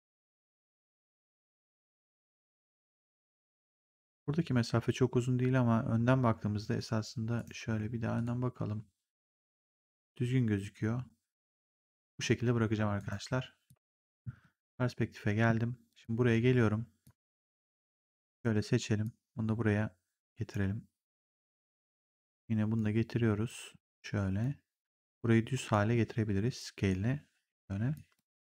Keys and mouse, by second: 0.4 click, 1.5 click, 7.3 right click, 8.1 click, 12.9 right click, 13.6 click, 15.9 click, 18.9 click, 21.4 click, 23.4 click, 24.8 click, 26.5 click, 27.8 click.